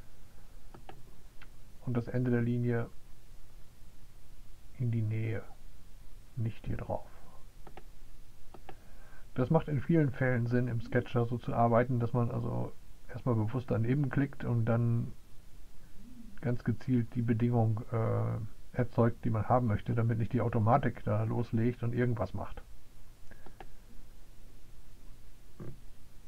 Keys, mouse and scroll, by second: 0.0 click, 0.6 click, 8.1 right click, 24.0 click, 25.0 click.